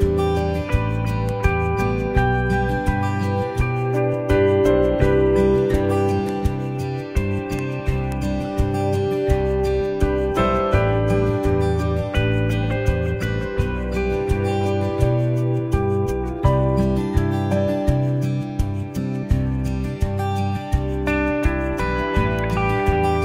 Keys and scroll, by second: 12.6 super+j, 18.0 super+j, 20.8 super+t.